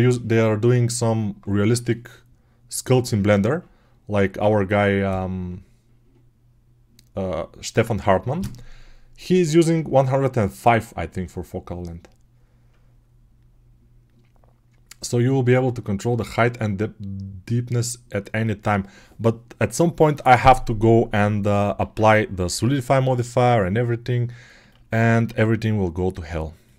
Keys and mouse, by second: 21.7 alt+q, 22.3 g, 24.8-26.7 alt+drag.